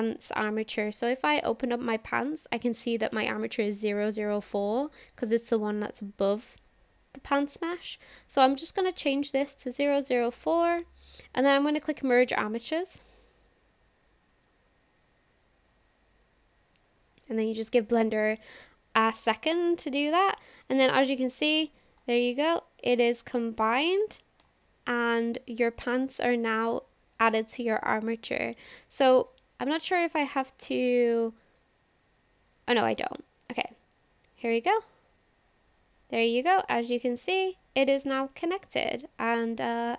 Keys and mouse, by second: 9.0-10.3 drag, 11.8-17.2 drag, 19.5 click, 21.1 shift+middle click, 21.2-21.6 shift+drag, 22.4-24.1 shift+drag, 24.6 shift+click, 29.4 click, 31.6-33.2 drag, 34.3 ctrl+z, 34.5-39.7 drag.